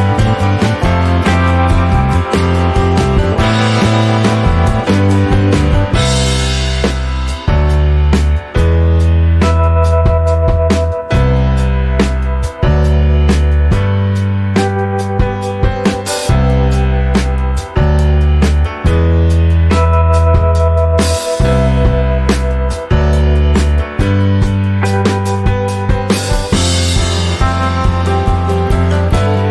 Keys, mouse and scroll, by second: 0.4 middle click, 0.9 click, 1.5 shift+click, 2.5 click, 4.1 middle click, 4.9 click, 5.9 click, 8.6 click, 9.2 middle click, 10.0 click, 11.1 click, 12.6-14.6 middle drag, 14.6 click, 15.0 middle click, 15.7 click, 16.2 middle click, 17.1 click, 19.1-21.9 middle drag, 21.9 click, 22.5 shift+middle click, 23.1 click, 23.4 middle click, 24.4 click, 25.4 scroll down 4, 25.6-27.1 middle drag, 27.1 click, 27.5 middle click, 28.0 click, 29.1 shift+click.